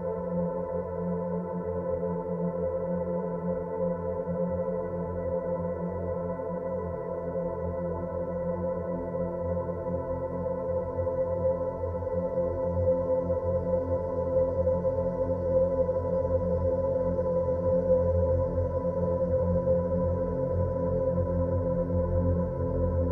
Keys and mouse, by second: 3.2 click, 5.0 click, 6.3 s, 12.1-13.7 drag, 18.1 shift+a.